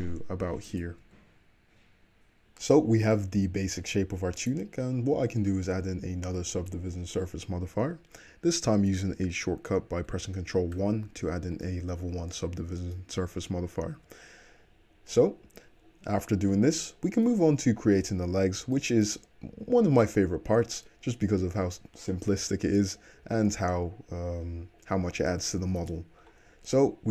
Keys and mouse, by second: 1.1 Tab, 2.4-4.4 middle drag, 2.4 `, 4.4 click, 4.5-13.3 middle drag, 10.8 ctrl+1, 13.3 `, 13.9-20.6 middle drag, 14.0 `, 20.6-27.1 drag, 20.6-27.1 right drag.